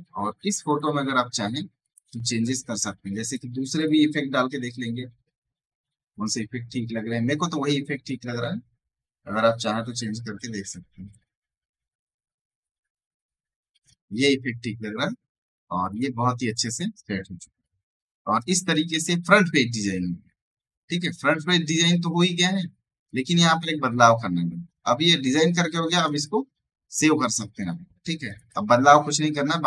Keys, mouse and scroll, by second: 0.5 click, 4.3 Down, 7.7-9.1 scroll down 1, 16.2 click, 16.2 space, 16.4 right click, 16.6 click, 17.2 alt+scroll down 1, 17.9 alt+scroll up 1, 18.3 right click, 18.5 click, 22.9 click, 23.9 alt+scroll down 1, 24.6 alt+scroll up 1, 25.0 right click, 25.0 space, 25.8 right click, 26.1 click, 28.1 space, 28.2 right click, 28.4 click.